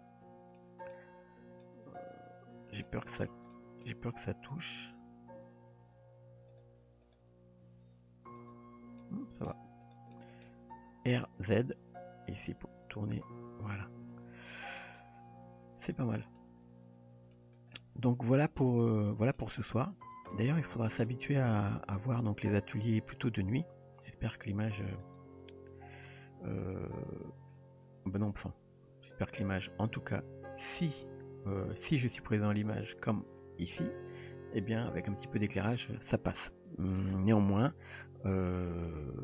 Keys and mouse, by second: 0.6 shift+middle click, 1.6-2.8 middle drag, 3.5-3.9 shift+middle drag, 5.4 g, 7.1 click, 7.7 g, 9.0 middle click, 9.8 click, 10.1 middle click, 11.6 r, 13.9 Tab, 14.5-15.0 middle drag, 15.9-16.4 middle drag, 17.3 middle drag, 18.3 Tab, 19.0 click, 19.4 middle click, 20.1 drag, 20.3-21.0 middle drag, 21.7 g, 23.1 click, 24.0 click, 24.6 g.